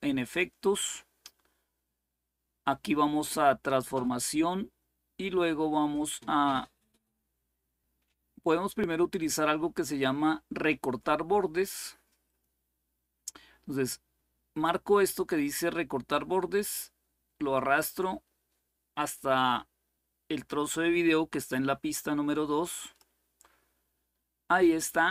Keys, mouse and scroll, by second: 0.0 click, 3.6 click, 12.0 click, 17.5-23.4 drag.